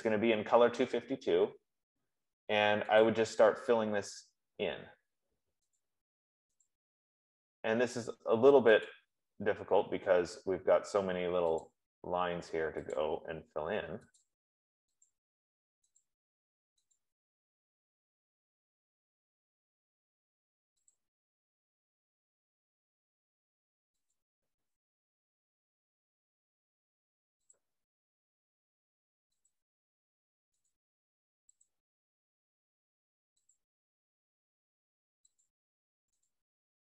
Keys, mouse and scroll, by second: 3.3 click, 4.3 middle click, 6.2 click, 7.1 click, 9.3 click, 11.9 click, 13.3 click, 14.6 click, 15.4 click, 16.4 click, 17.0 F15, 17.3 click, 21.3 click, 24.5 click, 27.9 click, 29.8 click, 31.0 click, 32.0 click, 34.0 click, 35.6 click, 36.8 click.